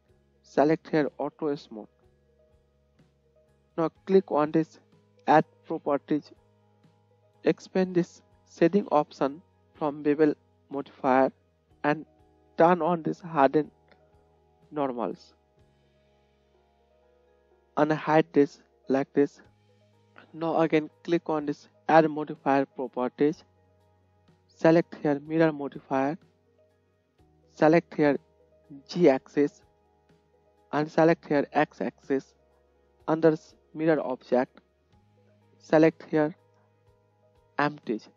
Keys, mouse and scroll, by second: 2.3-6.9 right drag, 6.9-15.0 middle drag, 15.0 right click, 15.1-17.6 drag, 17.1 middle click, 17.1 right click, 29.4-33.5 drag.